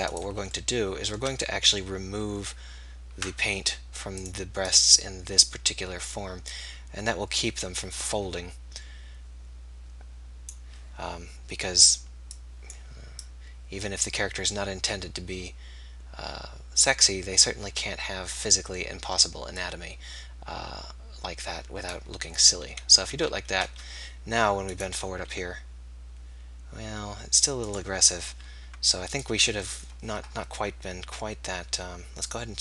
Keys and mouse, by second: 2.8-23.5 drag, 23.5 KP_3, 25.3 r, 32.2-32.6 drag.